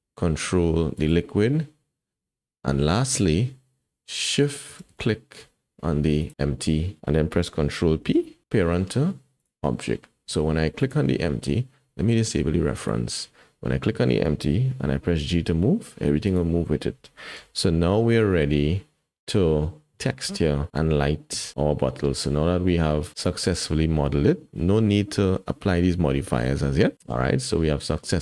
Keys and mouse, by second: 1.0 ctrl+click, 6.2 shift+click, 7.9 ctrl+p, 10.8-12.9 drag, 15.0 g, 17.4 KP_1, 23.3 click, 27.0 alt+a.